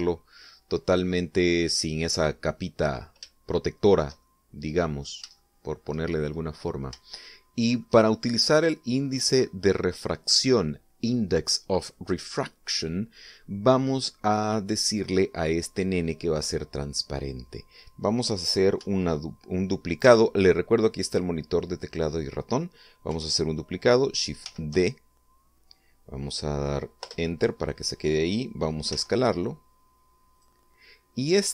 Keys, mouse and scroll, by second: 3.5 scroll down 3, 4.0 shift+middle click, 5.0 middle click, 5.5 scroll up 3, 5.8 shift+middle click, 7.5 shift+scroll down 2, 7.7 shift+middle click, 24.9 shift+d, 28.0 Return, 29.4 s, 30.8 click.